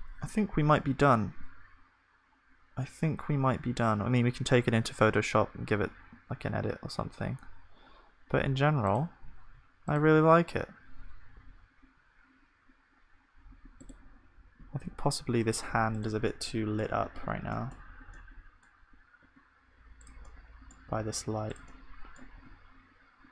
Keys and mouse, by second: 5.7-8.9 middle drag, 11.2-13.5 drag, 13.5-20.9 middle drag, 20.9 g.